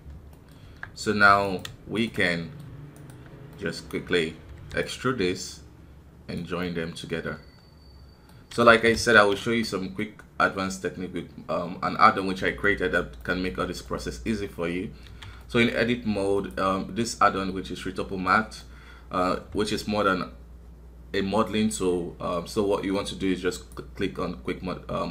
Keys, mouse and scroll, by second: 0.3 middle click, 0.5 scroll up 1, 0.6 Tab, 1.4 right click, 2.2 middle click, 2.9 shift+right click, 3.5-4.6 middle drag, 4.6 e, 5.4-6.8 drag, 6.8-8.6 middle drag, 8.6 ctrl+z, 9.6-14.9 middle drag, 14.9 scroll down 1, 15.0 a, 15.4-25.1 middle drag.